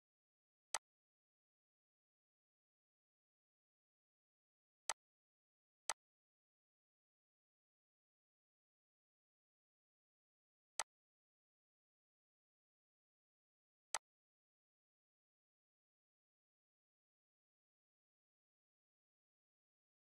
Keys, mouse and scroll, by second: 0.7 click, 4.9 click, 6.6-7.0 scroll, 7.4 scroll, 7.5 scroll up 1, 10.8 click, 10.8 click, 13.9-20.1 drag.